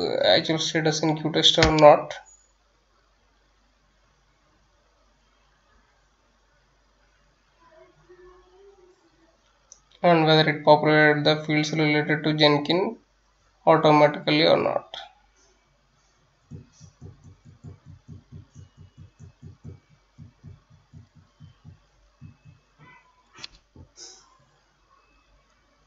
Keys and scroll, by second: 0.0-25.8 typing.